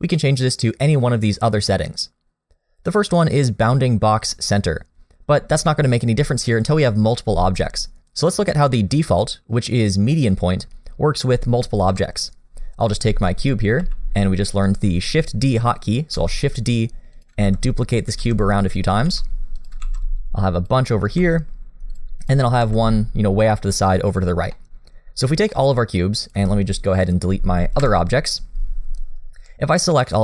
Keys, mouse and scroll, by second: 9.3 click, 11.9 KP_7, 12.8 click, 13.3 shift+middle click, 13.8 g, 16.1 shift+d, 17.4 shift+d, 18.4 shift+d, 19.0 shift+d, 19.8 shift+d, 21.0 shift+d, 22.2 click, 22.6 g, 24.3-25.0 scroll down 2, 24.5 middle click, 25.3 scroll down 2, 25.5 middle click, 26.3 click, 27.0 shift+click, 27.3 scroll down 1, 27.8 Delete, 29.0 click.